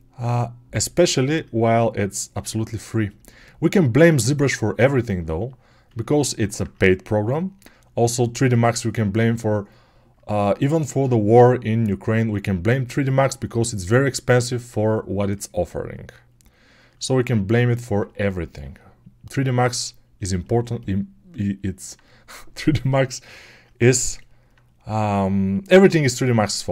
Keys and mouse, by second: 5.9-9.3 alt+right drag, 9.3-26.7 alt+drag.